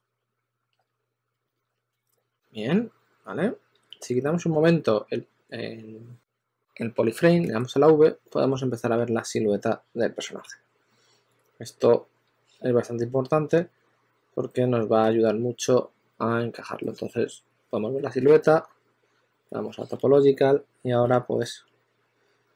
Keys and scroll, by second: 0.0 2, 1.2 s, 3.7 shift+f, 7.3 v, 14.9 s, 16.2 s, 17.6-21.3 typing.